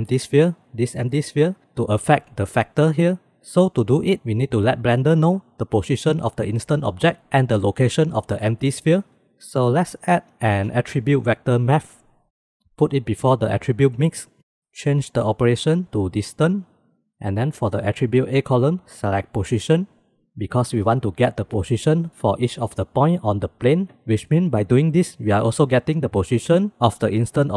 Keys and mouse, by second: 0.6-1.3 drag, 10.1 shift+a, 15.3-16.6 drag, 18.8-20.1 drag, 20.7-21.8 drag.